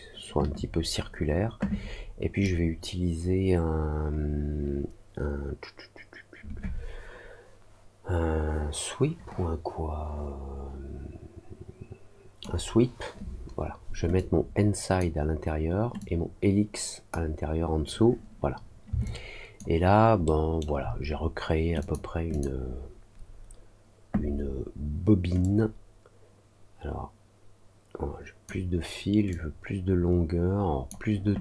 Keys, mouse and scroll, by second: 2.4-12.3 drag, 14.1 click, 15.9-17.0 drag, 19.0 alt+click, 20.2 alt+middle click, 21.7 click, 22.2 click, 25.3-28.4 drag, 29.2-30.8 drag.